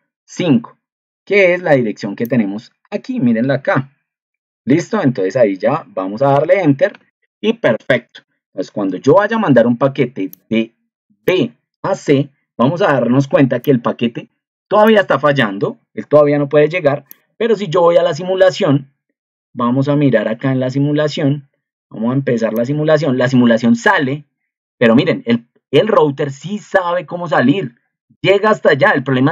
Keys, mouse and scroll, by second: 3.6 ctrl+2, 17.1 click.